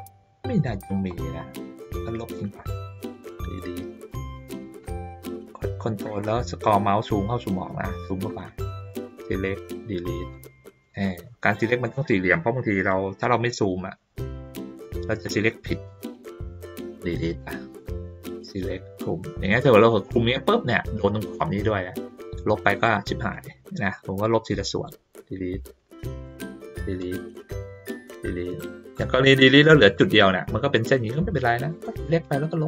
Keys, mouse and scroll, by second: 0.8 ctrl+middle click, 1.1 ctrl+middle click, 2.1 click, 4.1 middle click, 5.9 ctrl+middle click, 6.7 ctrl+middle click, 7.0-7.4 ctrl+scroll down 2, 7.4-8.2 ctrl+scroll up 1, 8.2 ctrl+scroll up 1, 8.6 click, 10.8 middle click, 11.7-12.9 drag, 15.2 click, 17.4 middle click, 18.3-20.5 drag, 22.8 click, 23.3 click, 26.2 click, 27.5-29.4 drag, 31.1 click, 32.2 click.